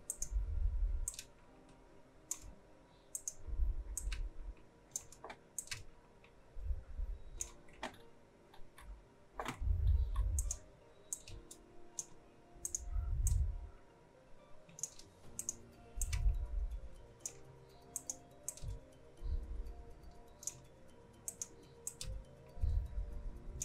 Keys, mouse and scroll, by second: 0.0-3.1 drag, 3.1-5.5 drag, 5.5-7.8 drag, 7.8-8.4 alt+scroll up 1, 9.5 alt+scroll down 1, 9.7-10.1 alt+scroll up 1, 10.3-23.6 drag.